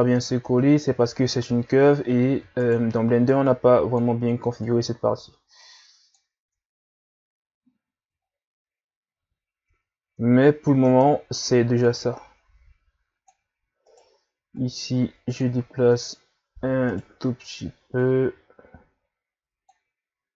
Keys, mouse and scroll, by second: 0.5 Tab, 0.8-1.2 scroll down 2, 1.6-2.6 scroll up 2, 2.7 right click, 3.4-6.4 drag, 6.4 Tab, 6.8 scroll down 4, 7.3-7.9 ctrl+scroll up 2, 8.3-9.0 ctrl+scroll up 1, 9.0 scroll up 1, 9.7 Tab, 10.0 Tab, 10.9 Tab, 11.9-13.9 drag, 13.9 right click, 14.6-16.9 drag, 16.9 right click, 18.0-20.3 drag.